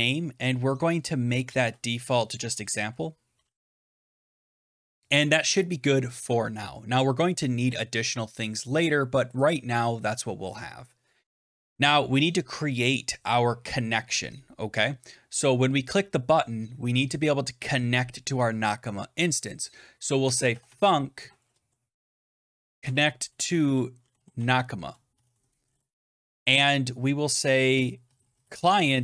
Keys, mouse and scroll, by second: 0.0-4.8 typing, 9.4 click, 12.6 BackSpace, 19.9-26.0 typing, 27.7-29.0 typing.